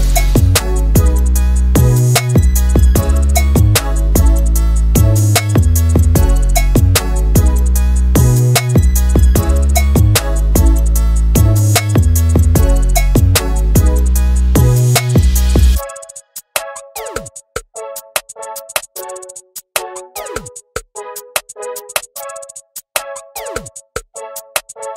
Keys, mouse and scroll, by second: 0.0 Left, 0.6 ctrl+Left, 1.3 Left, 1.4 Left, 1.8 Left, 1.9 scroll down 1, 2.1 click, 2.6 scroll down 1, 2.7 scroll up 2, 2.8 click, 2.9 middle click, 3.6 shift+middle click, 3.9 Tab, 4.0 right click, 4.1 middle click, 4.3 click, 4.5 scroll up 2, 4.5 shift+middle click, 4.6 scroll down 1, 5.5 middle click, 5.9 shift+click, 6.2 scroll down 2, 6.3 alt+a, 6.4-6.7 scroll up 2, 6.7 middle click, 7.0 shift+e, 7.3 scroll down 1, 7.4 scroll up 1, 7.5 Tab, 7.6-8.0 scroll down 2, 7.7 click, 8.0 ctrl+2, 8.1 scroll up 2, 8.2 middle click, 8.4 click, 8.5 Tab, 9.5 click, 9.6 middle click, 10.0-11.1 shift+drag, 11.2 scroll up 1, 11.3-11.7 scroll down 3, 11.4 middle click, 11.7 middle drag, 11.8 KP_7, 11.9 click, 12.1 s, 12.2 click, 12.3 alt+a, 12.4 scroll down 1, 12.5 shift+middle click, 12.7 scroll up 3, 12.8 shift+middle click, 12.9 click, 13.4 ctrl+z, 13.5 o, 13.7 g, 14.1 s, 14.2 click, 14.4 s, 14.6 click, 14.7 click, 14.8-15.6 scroll down 5, 14.9 Tab, 15.1 alt+z, 15.4 middle drag, 15.6 KP_1, 15.8 click, 15.9 g, 16.2 alt+a, 16.3 scroll up 1, 16.4 shift+middle click, 16.7 scroll down 1, 17.0 click, 17.0-20.1 typing, 17.1 scroll up 1, 17.3 click, 17.4-18.0 scroll down 11, 18.0 scroll up 2, 18.1 scroll down 1, 18.1 shift+middle click, 20.4 click, 20.5 alt+a, 20.6-21.0 scroll up 3, 20.8 click, 21.0 middle click, 21.1 click, 21.4 scroll down 2, 21.6 alt+a, 21.7 scroll up 1, 21.8 click, 22.0 x, 22.3-22.7 scroll up 2, 22.7 click, 22.7 scroll down 1, 22.8 shift+middle click, 23.0 KP_1, 23.2-23.7 scroll up 2, 23.7 click, 23.9 scroll down 1, 24.0 shift+middle click, 24.0-24.9 scroll up 1.